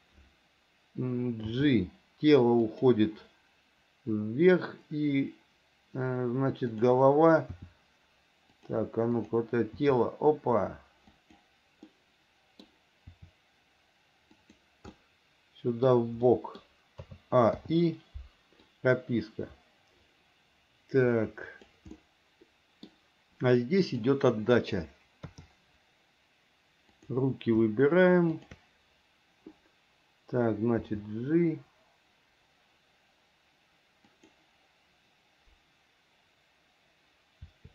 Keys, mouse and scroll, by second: 1.7 g, 6.9 click, 7.8 r, 10.0 r, 12.1 middle click, 13.3 r, 15.2 middle click, 16.5 middle click, 17.3 a, 17.8 i, 18.9-22.0 drag, 22.2 middle click, 24.1 click, 25.5 KP_3, 27.2 click, 31.0 g.